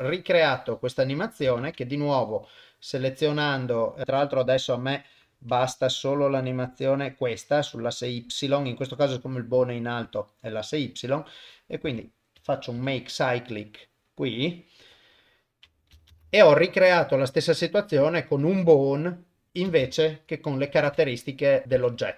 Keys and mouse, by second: 1.6 ctrl+Tab, 2.5 click, 2.9 click, 4.0 click, 4.0 middle click, 5.2 click, 6.5 click, 7.3 click, 7.8 click, 8.1 Delete, 8.6 click, 10.1 Delete, 10.6 click, 11.8 a, 12.8 shift+e, 16.1 shift+space, 19.7 shift+space, 20.4 shift+Left, 21.8 ctrl+Tab.